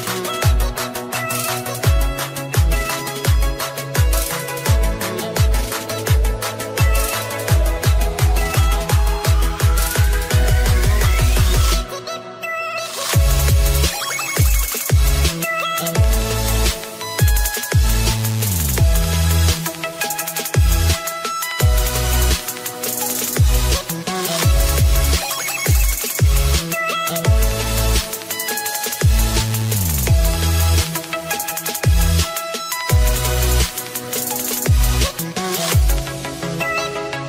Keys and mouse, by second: 1.9 click, 12.3 click, 13.4 KP_Multiply, 13.4 click, 17.3 click, 24.6 click, 26.5 click, 26.5 u, 28.2 click, 28.2 u, 30.3 shift+Page_Up, 35.5 click.